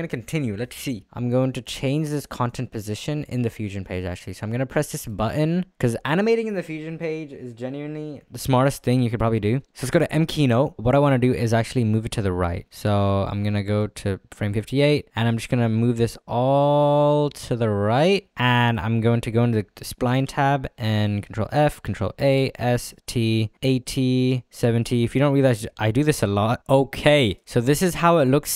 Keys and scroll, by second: 10.8 ctrl+z, 22.4 s, 22.6 t.